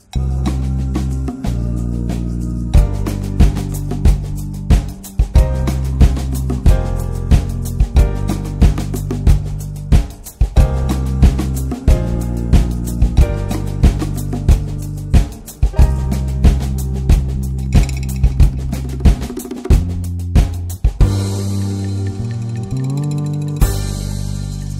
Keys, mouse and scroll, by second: 5.6 middle click, 5.8 scroll up 1, 6.3 shift+middle drag, 6.6-7.9 scroll up 2, 6.9 shift+middle click, 7.9-11.1 ctrl+middle drag, 11.1-12.2 drag, 12.2 n, 13.5-16.4 ctrl+middle drag, 16.4 click, 16.7-20.2 middle drag, 20.2-24.7 drag.